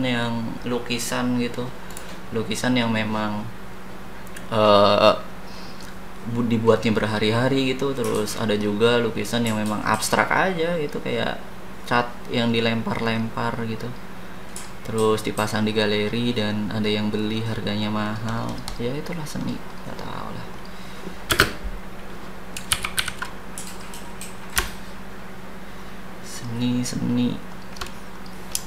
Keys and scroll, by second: 21.3 space, 22.7 ctrl+c, 23.0 ctrl+v.